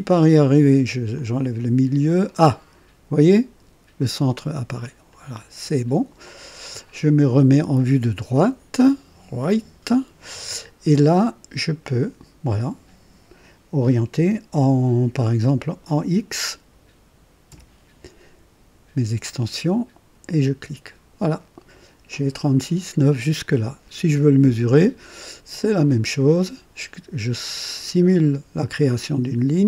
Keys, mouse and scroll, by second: 1.1 click, 5.0 click, 7.5 click, 9.4 click, 17.4 x, 20.2 click, 25.5 click.